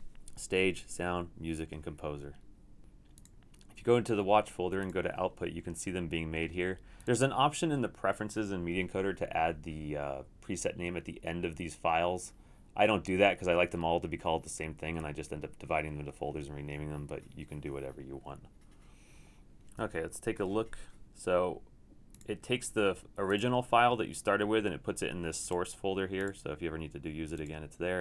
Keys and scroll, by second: 19.9 super+w.